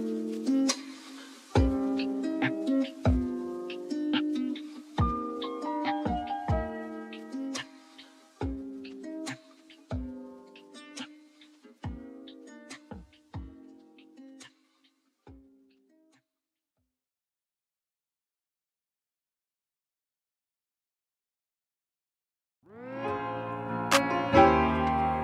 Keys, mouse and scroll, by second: 0.1-0.9 scroll up 4, 1.9-2.4 scroll up 1, 2.4-3.4 scroll down 2, 3.4-5.5 scroll down 1, 7.4-9.2 scroll up 3, 9.2 scroll up 1, 9.4 alt+click, 10.2 scroll up 2, 10.5 alt+middle drag, 11.1 alt+drag, 19.9-21.0 drag.